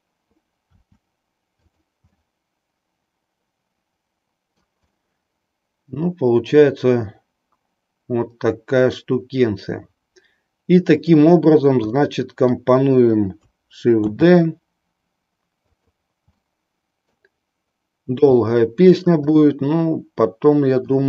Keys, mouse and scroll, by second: 0.7 r, 1.7 click, 2.1-4.9 middle drag, 5.0-11.0 middle drag, 11.9-12.8 middle drag, 14.0 shift+d, 16.5 middle click, 18.3 r, 19.4-21.0 middle drag.